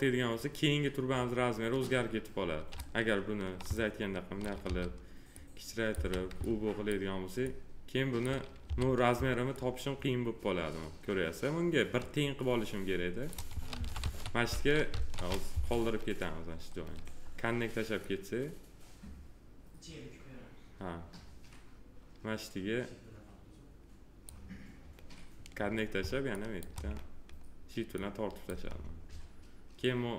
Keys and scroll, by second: 4.6 r, 5.9 w, 8.6 r, 13.7 ctrl+z, 15.5 w.